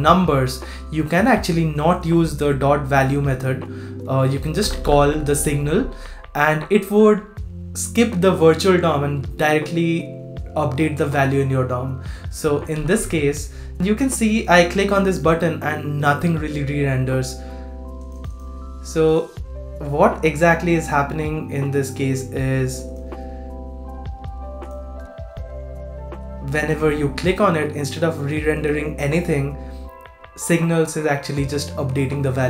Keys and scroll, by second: 12.7 super+r.